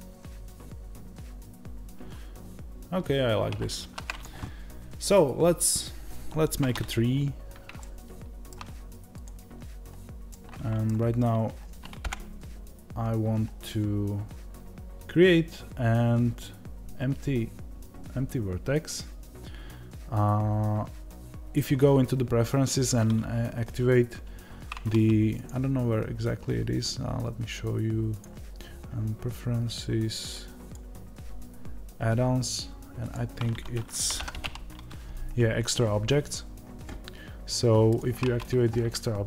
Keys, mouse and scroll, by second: 7.7-39.2 shift+middle drag, 11.9 KP_0.